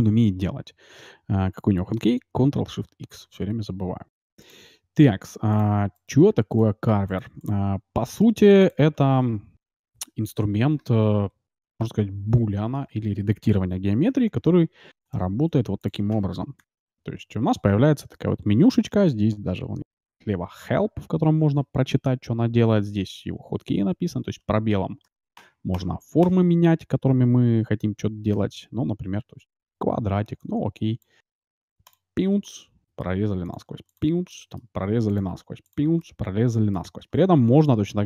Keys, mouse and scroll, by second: 5.5-7.1 drag, 5.9-8.8 right drag, 6.3 x, 7.3 x, 8.2-9.8 middle drag, 8.6-10.2 drag, 10.4 click, 14.0 shift+a, 15.5 s, 16.6 ctrl+shift+x, 32.4-34.0 middle drag, 34.4-37.9 middle drag.